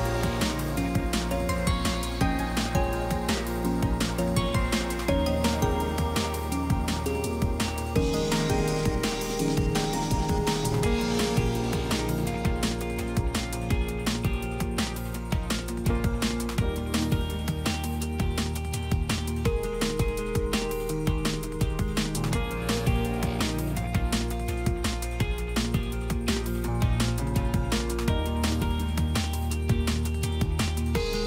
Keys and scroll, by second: 0.1 Return, 1.1 Return, 1.6 Return, 15.1 Return, 19.3 Return, 21.1 Return.